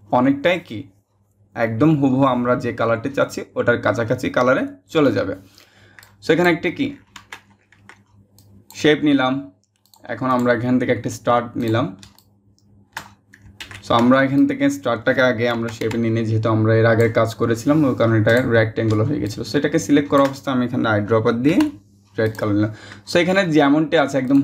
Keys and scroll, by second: 13.2 ctrl+shift+z, 15.1 Up, 15.4 Up.